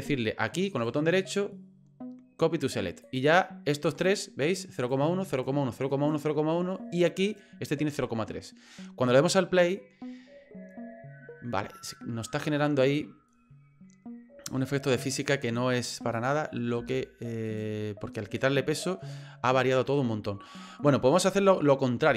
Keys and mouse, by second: 0.8-3.1 right drag, 3.9 right click, 4.8 right click, 5.3 right click, 5.9 right click, 7.2 right click, 9.7 click, 15.2 click, 16.1 click, 17.5 right click.